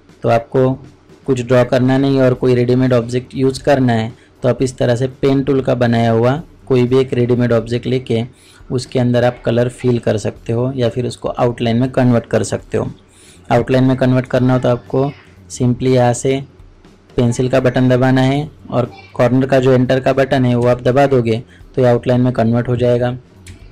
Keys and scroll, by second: 23.5 ctrl+space.